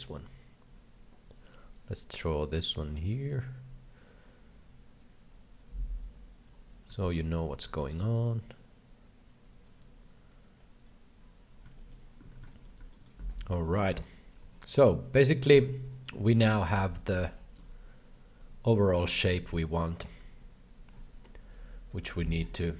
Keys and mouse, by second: 1.4 click, 2.2-3.2 drag, 4.5 click, 5.2 click, 6.0 click, 7.0 shift+middle click, 7.9 middle click, 8.6 click, 9.0 click, 9.6 click, 10.4 click, 10.8 click, 11.8 shift+middle click, 12.2 alt+a, 12.6 middle click, 12.9 shift+middle click, 13.3 alt+a, 13.4 b, 13.8 c, 15.2 middle click, 15.2 c, 15.5 shift+middle click, 15.8 middle click, 16.4 ctrl+click, 17.6-20.9 ctrl+drag, 21.6 KP_7.